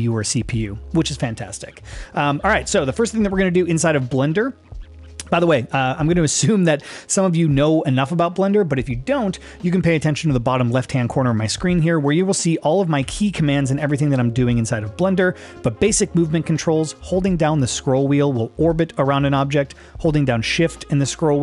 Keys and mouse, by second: 3.0 middle click, 11.6-12.5 middle drag, 13.0 g, 14.0 middle click, 17.8-20.0 middle drag, 20.8-21.4 shift+middle drag.